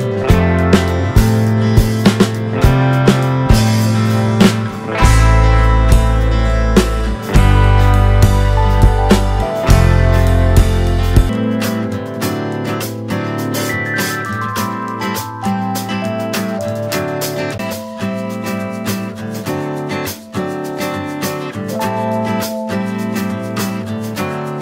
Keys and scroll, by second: 1.5 ctrl+space, 11.2 shift+d, 17.3-20.3 typing, 21.6 t.